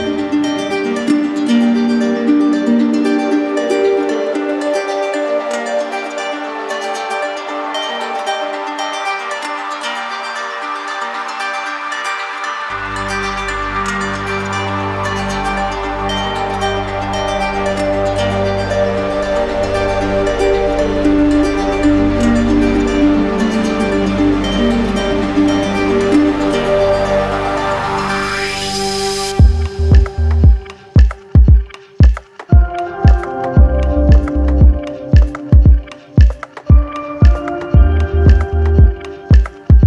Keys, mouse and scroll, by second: 2.6 click, 4.6 click, 6.0 shift+click, 6.7 shift+click, 7.3 shift+click, 7.6 shift+click, 8.8 shift+click, 10.2 shift+click, 10.6 alt+right click, 12.1 z, 13.4 click, 16.0 click, 18.3 alt+click, 18.6 ctrl+z, 23.3 alt+click, 26.8 alt+click, 27.1 shift+click, 28.0 shift+click, 28.9 shift+click, 29.3 shift+click, 29.9 shift+click, 30.2 shift+click, 30.4 shift+click, 30.6 shift+click, 31.0 z, 32.0 click, 32.9 click, 34.2 right click, 35.2 right click, 37.0 alt+click, 38.5 alt+click, 39.0 alt+click.